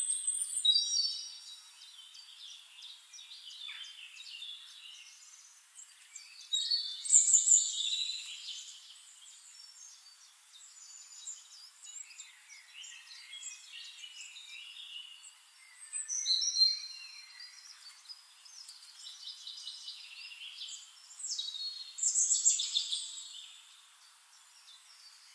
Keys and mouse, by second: 2.8 ctrl+z, 3.9 click, 5.6-9.9 drag, 11.0-21.4 drag, 22.1 click, 23.9-25.3 drag, 24.5-25.3 right drag.